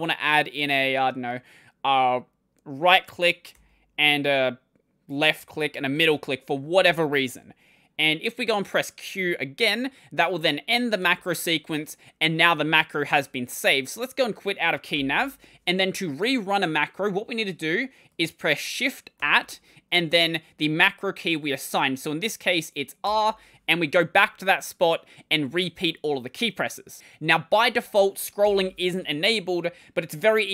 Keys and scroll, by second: 3.4 typing, 5.0-5.8 typing, 10.8 q, 14.1 Escape, 14.8 ctrl+;, 19.0 @, 28.3 ctrl+;, 29.7-30.5 typing.